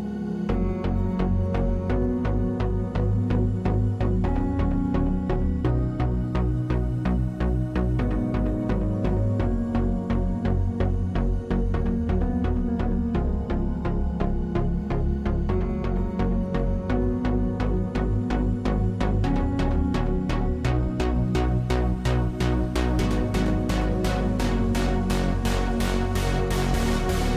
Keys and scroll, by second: 4.3 space, 5.0 space, 15.1 3, 19.6 space, 20.5 space.